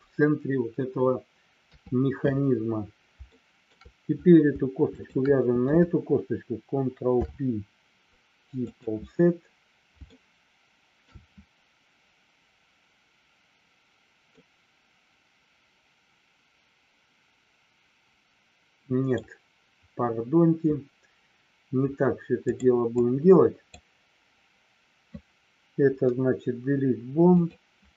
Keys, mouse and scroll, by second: 1.6 KP_3, 3.3 shift+middle click, 5.0 shift+click, 7.1 ctrl+p, 10.1-11.1 shift+middle drag, 14.2-19.0 middle drag, 22.5 click, 23.0 click, 25.9 Delete.